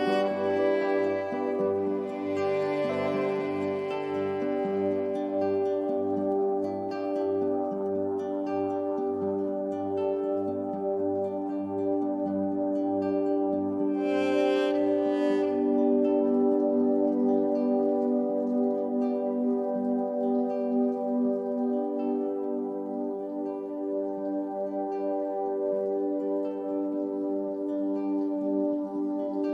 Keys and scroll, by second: 16.2 Up, 25.9 Down.